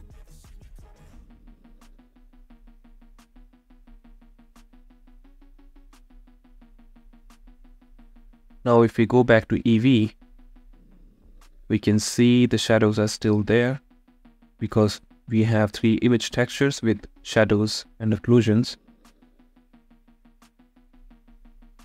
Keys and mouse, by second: 0.0 n, 1.9 middle click, 8.6-11.5 right drag, 11.5-13.4 drag, 15.9 middle click, 17.3 middle click, 17.8-21.8 middle drag.